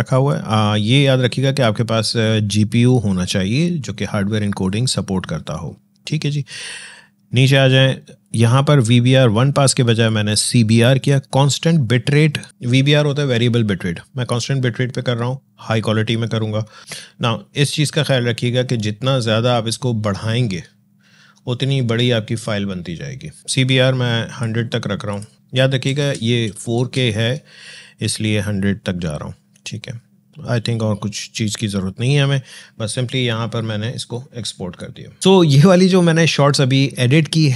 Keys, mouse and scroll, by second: 30.3-32.4 drag, 34.6 click.